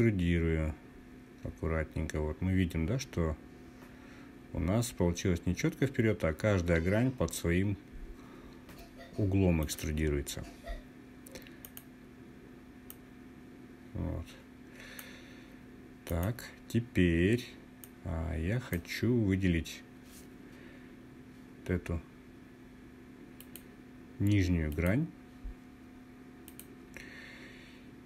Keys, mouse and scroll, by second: 9.1 click, 11.1 click, 12.4 click, 12.6-14.6 drag, 15.6 click, 17.3-18.4 drag, 20.8-22.4 scroll up 4, 22.4-22.9 scroll up 1, 22.9 click, 24.2 click, 26.0 click.